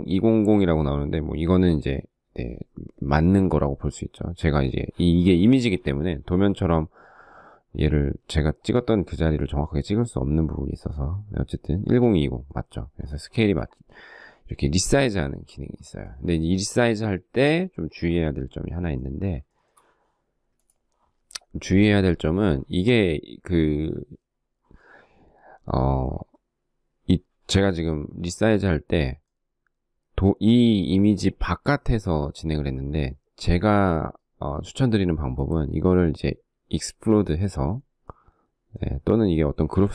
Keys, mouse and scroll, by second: 12.7 space, 18.7 shift+middle click.